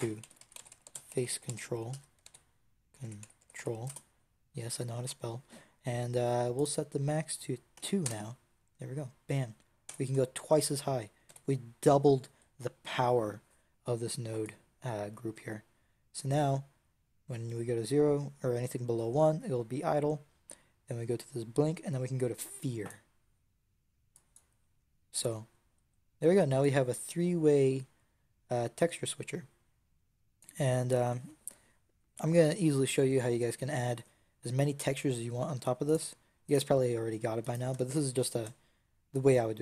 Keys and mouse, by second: 0.9-6.4 middle drag, 6.4 click, 9.8 Tab, 11.1 n, 35.8-39.3 right drag.